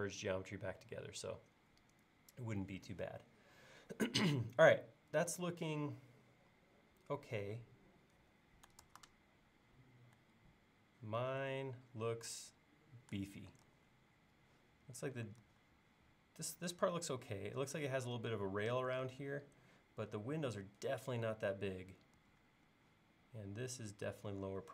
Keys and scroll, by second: 8.9 super+Tab, 11.2 super+Tab, 13.7 super+Tab, 15.5 super+Tab, 19.1 super+Tab, 22.2 super+Tab.